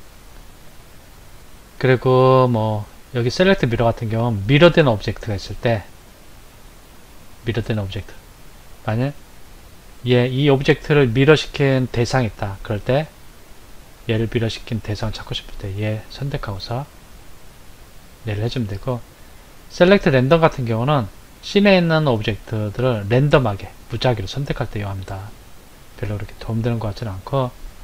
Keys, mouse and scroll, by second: 8.7 click, 9.7 click, 15.8 Left, 17.0 Left, 20.7 click, 24.5 click.